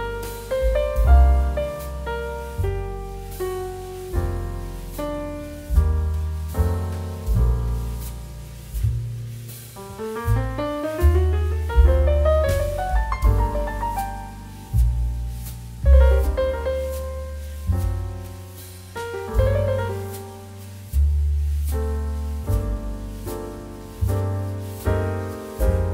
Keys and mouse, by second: 1.5 shift+middle click, 2.4 right click, 2.6 click, 3.6 r, 4.3 Escape, 4.5 z, 5.0 middle click, 5.4 Escape, 5.8 g, 7.5 Escape, 8.0 click, 9.9 right click, 10.7 click, 11.1 g, 13.0 click, 13.4 right click, 13.6 click, 17.2 click, 21.2 click, 22.2 5, 22.4 Return, 23.3 click, 23.6 ctrl+v, 24.8 Return, 25.4 right click, 25.6 click.